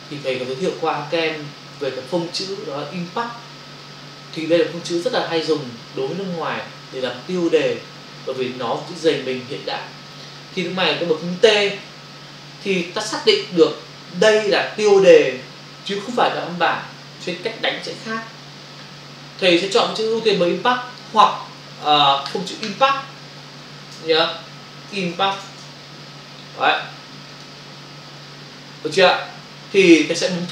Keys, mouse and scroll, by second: 20.5 click, 21.7 click, 22.0 double click, 22.3 click, 22.7 double click, 22.8 click, 24.9 i, 27.4 click.